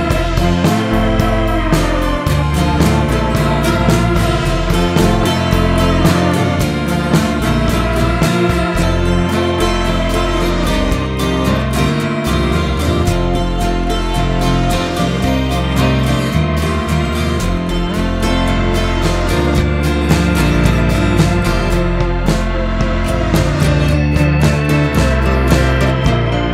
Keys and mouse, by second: 0.4-0.8 shift+middle drag, 2.0-3.1 middle drag, 5.1 click, 21.4 click.